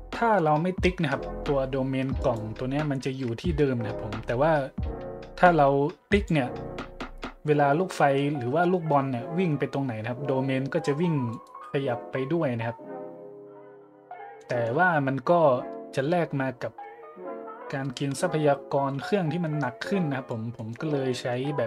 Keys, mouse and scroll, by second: 0.1 middle click, 2.2 right click, 6.1 click, 7.7 middle click, 7.9-8.3 middle drag, 11.3 right click, 14.4 middle drag, 16.3 middle click, 16.6 middle click, 17.1 middle click, 18.0 n, 19.6 click, 20.6 middle drag.